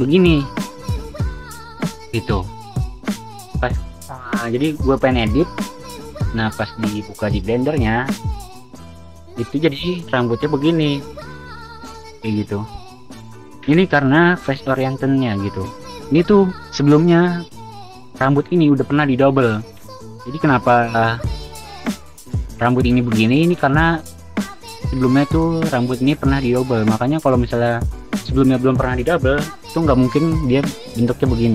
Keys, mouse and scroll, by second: 11.4-12.4 typing, 17.4-18.4 typing, 20.2-25.1 typing, 24.1 click, 29.2 v, 29.5 v, 31.3 v.